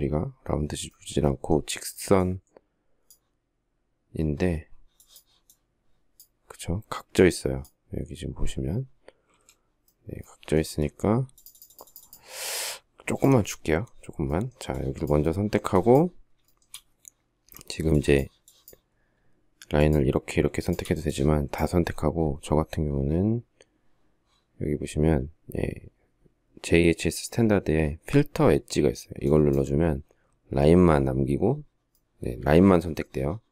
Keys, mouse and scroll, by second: 8.7 alt+Tab, 15.8 shift+middle click, 20.0 shift+click, 33.3 shift+middle click.